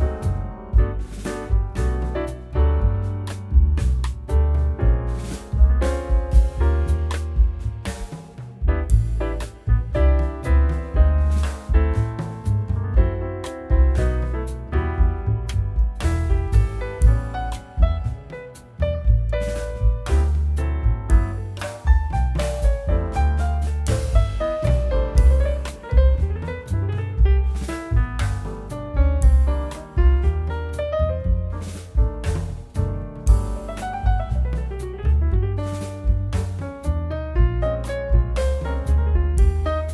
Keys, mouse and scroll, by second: 3.1 ctrl+click, 3.2 middle click, 4.3 ctrl+click, 4.7 scroll down 1, 5.0 middle click, 5.2 scroll up 1, 5.7 scroll down 1, 6.4 middle click, 8.5 scroll up 1, 9.9 e, 12.2 Return, 12.7 scroll up 1, 13.2 e, 13.5 w, 15.5 w, 17.0 alt+middle click, 18.1 alt+middle click, 18.1 scroll up 1, 18.6 ctrl+click, 19.0 alt+q, 19.9 f, 21.0 middle click, 21.4-22.0 scroll down 1, 22.0 z, 22.3 z, 22.5 scroll up 1, 23.0 middle click, 23.3-24.1 scroll up 1, 24.1 F4, 28.2-29.1 scroll up 1, 29.1-31.0 scroll down 1, 31.1 scroll down 1, 31.1 middle click, 31.6 alt+scroll down 1, 31.9 alt+middle click, 35.4 right click.